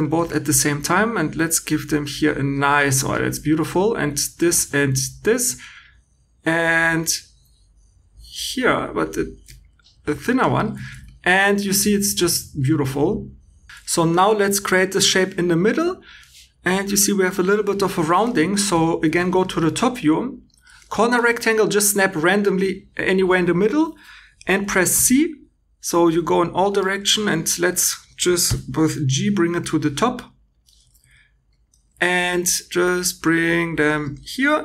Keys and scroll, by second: 3.9 2, 10.8 shift+e, 12.6 2, 18.5 shift+e, 24.9 c, 28.4 g, 32.3 g.